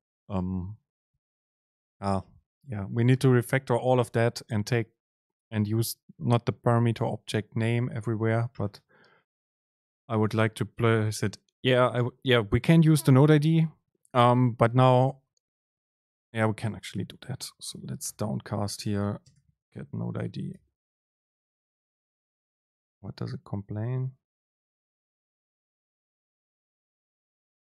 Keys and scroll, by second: 3.6 shift+Left, 15.5 Right, 16.3 ctrl+shift+super+Left, 16.7 BackSpace, 18.1 BackSpace, 18.2 super+space, 21.3 ctrl+shift+super+Left.